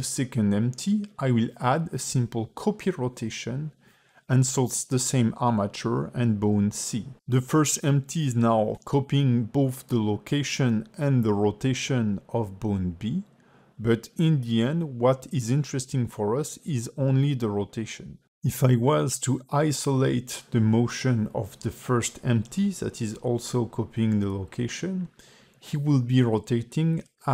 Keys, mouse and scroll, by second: 4.0 click, 6.0 click, 8.1 space, 10.2 click, 12.3 click, 14.4 click, 16.5 click, 18.6 click, 20.7 click, 22.8 click, 24.9 click, 27.1 space.